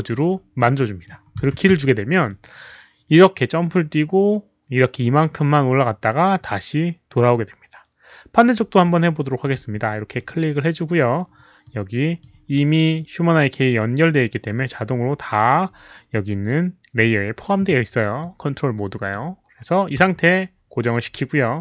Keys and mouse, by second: 0.0-0.2 typing, 2.0-2.7 typing, 2.2-8.5 drag, 2.2 middle click, 8.3-10.0 typing, 8.5 middle click, 9.5 click, 10.1 click, 11.6 click, 16.3 click, 16.3 q, 18.1-19.1 drag, 18.2 q, 19.7-20.4 typing, 21.0-21.6 drag.